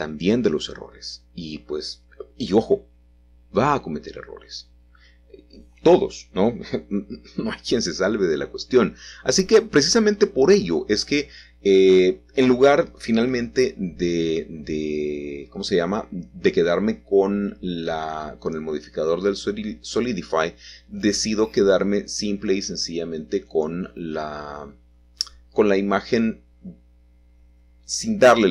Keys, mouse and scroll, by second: 3.9 alt+shift+click, 4.8-6.3 scroll down 2, 6.9 e, 10.5 click, 13.7-15.0 scroll down 1, 14.1 middle click, 15.1 click, 17.5-24.9 middle drag, 17.8-19.0 scroll up 2, 23.9-24.9 scroll down 2, 25.6 click, 26.4-27.3 scroll down 2, 26.6-28.5 middle drag.